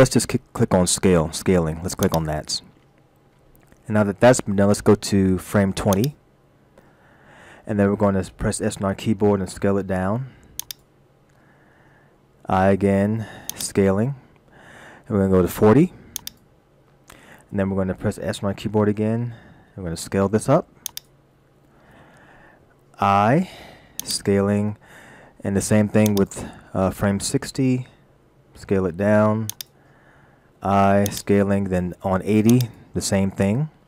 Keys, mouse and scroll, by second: 6.0 click, 9.1 s, 12.4 i, 16.2 click, 19.5 s, 23.4 i, 26.1 click, 28.3 s, 30.5 i, 32.5 click.